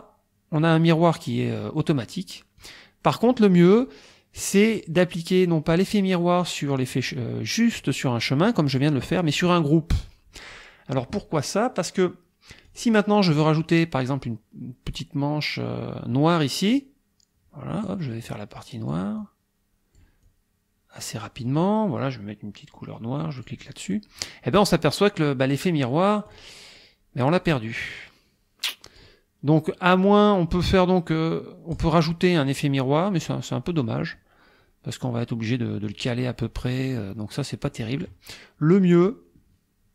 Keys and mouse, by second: 2.6 click, 4.7 click, 12.7 click, 16.7-18.1 drag, 18.3 click, 19.2-20.2 drag, 20.3-21.6 drag, 23.4 click, 26.3 click, 27.8-29.2 drag, 31.7 click, 33.2 click, 35.9-38.2 drag, 39.1 click.